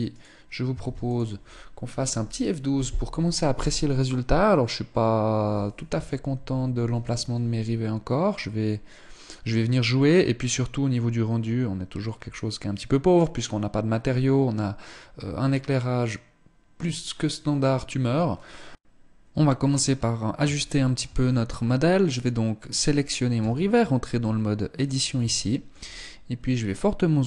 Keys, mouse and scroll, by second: 0.6 ctrl+s, 20.1 shift+middle click, 20.5-21.5 scroll up 3, 21.5 right click, 22.9 Tab, 23.7 middle click, 24.7 scroll up 1, 24.9 shift+middle click, 25.4-26.9 scroll up 1, 26.9 g.